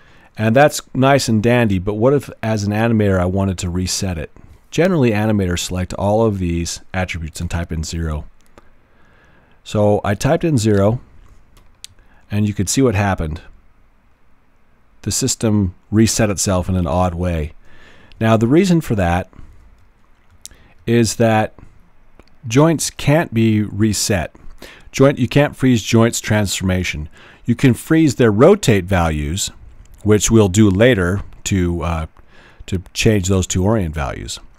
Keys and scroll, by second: 7.4 0, 7.9 Return, 18.4 super+z.